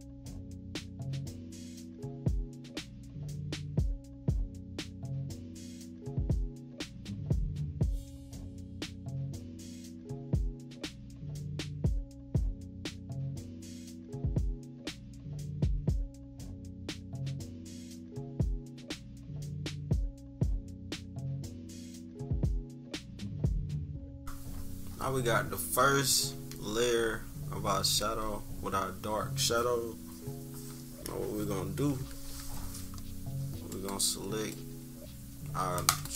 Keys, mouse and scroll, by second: 0.4 click, 1.4 -, 1.5-2.1 scroll up 6, 1.6 =, 2.0 -, 2.2-3.2 drag, 3.2 click, 3.9 click, 4.9 click, 5.2 click, 5.6 -, 6.2 =, 6.6-8.6 drag, 8.6 -, 8.9 -, 8.9 =, 9.0 scroll up 1, 9.2-10.4 drag, 10.4 -, 10.7 -, 10.9 =, 11.0 scroll up 2, 11.4-13.4 drag, 13.4 -, 13.6 =, 13.7-14.1 scroll up 3, 13.8 =, 14.2-15.4 drag, 15.6 -, 15.7 =, 16.0 click, 16.8 click, 17.1 click, 17.5-18.6 typing, 18.5 scroll up 1, 19.0 click, 19.6 click, 20.1 -, 20.4 =, 20.6 scroll up 2, 20.9 click, 21.8-22.7 typing, 22.6 scroll down 2, 22.9 click, 23.8 click, 24.1 -, 24.2 scroll up 2, 24.8 scroll up 2, 26.5 -, 26.7 scroll down 2, 27.3 scroll down 2, 27.9 =, 32.0 -, 32.7 scroll up 2, 33.6-36.1 drag.